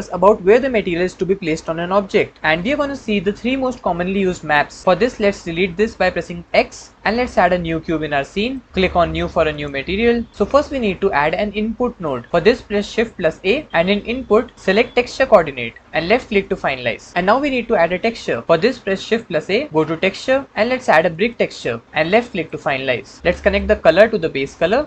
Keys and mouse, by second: 4.8 c, 5.4 x, 6.9 shift+a, 7.0 shift+a, 8.7 ctrl+z, 9.5 click, 13.1 shift+a, 19.1 shift+a, 23.4-24.8 drag.